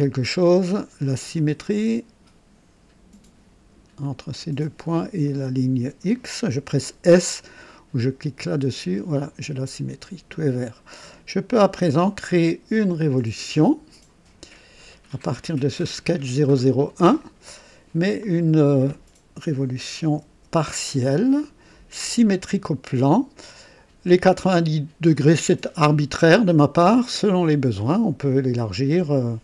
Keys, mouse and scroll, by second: 1.3 click, 4.0 click, 5.2 click, 8.7 s, 9.5 click, 11.7 typing, 16.1 click, 18.2 click, 19.7 KP_9, 20.2 KP_0, 21.9 click, 23.1-24.6 drag, 24.1 typing, 25.1 click.